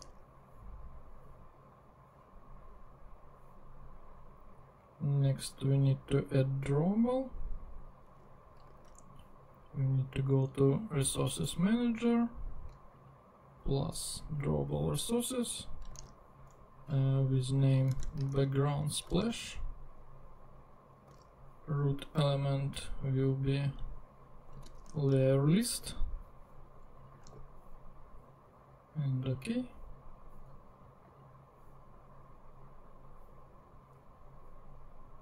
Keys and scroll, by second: 0.0 super+Tab, 8.8 super+Tab, 16.0 super+Tab, 17.9 super+c, 18.3 super+Tab, 19.1 super+v, 21.1 super+Tab, 24.7 super+c, 24.8 super+Tab, 27.3 super+v.